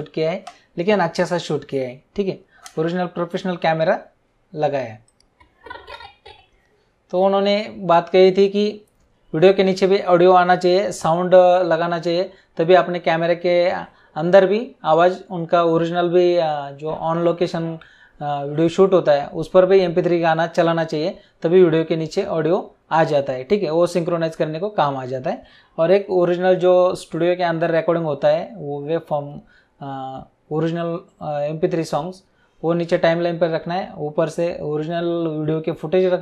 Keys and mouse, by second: 5.1 click.